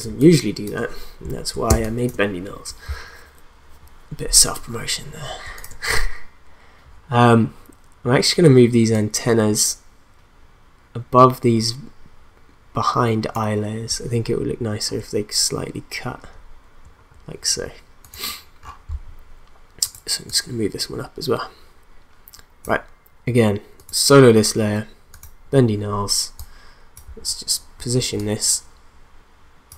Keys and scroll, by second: 0.1 space, 1.7 space.